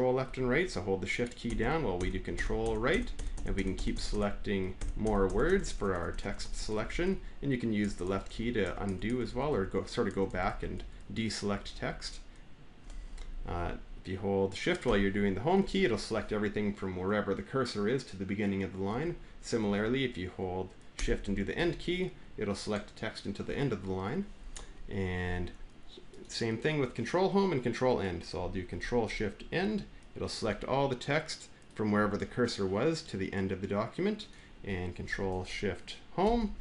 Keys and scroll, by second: 1.3 ctrl+shift+Right, 1.8 ctrl+shift+Right, 2.2 ctrl+shift+Right, 2.4 ctrl+shift+Right, 2.7 ctrl+shift+Right, 3.6 ctrl+shift+Right, 4.9 ctrl+shift+Right, 7.0 ctrl+shift+Right, 7.8 ctrl+shift+Left, 8.0 ctrl+shift+Left, 8.4 ctrl+shift+Left, 8.6 ctrl+shift+Left, 9.1 ctrl+shift+Left, 12.9 Down, 14.7 Up, 15.3 Home, 18.7 Right, 19.4 Right, 21.3 End, 24.2 Left, 29.4 ctrl+shift+End, 36.1 ctrl+shift+Home.